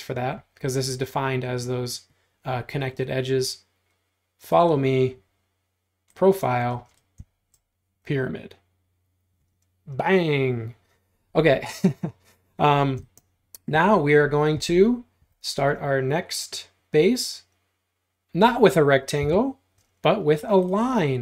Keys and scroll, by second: 6.8 space, 15.3 r, 19.3 l.